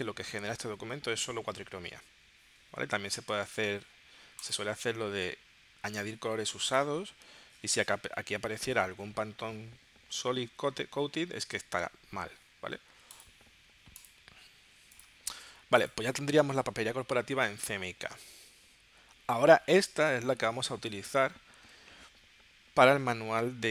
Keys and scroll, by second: 18.6 super+s.